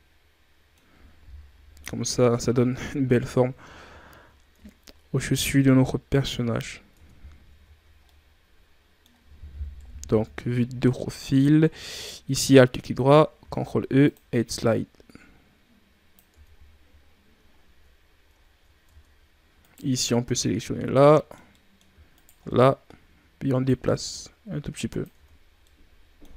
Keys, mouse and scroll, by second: 1.4 KP_7, 2.7-3.1 scroll up 3, 3.1 Tab, 3.8 scroll down 5, 4.5 Tab, 5.0-6.9 scroll down 1, 6.9 Tab, 7.6 shift+scroll up 3, 7.9-9.7 middle drag, 9.7 KP_3, 10.7-11.8 scroll up 5, 11.8 alt+right click, 13.3 ctrl+e, 16.2 Tab, 17.1-17.6 scroll down 4, 18.3 ctrl+scroll down 5, 18.8 Tab, 19.5 right click, 19.7 scroll down 5, 20.0-22.1 middle drag, 22.1 shift+right click, 22.4-23.6 middle drag, 23.6-25.1 drag, 25.1 Tab, 25.5-26.3 middle drag.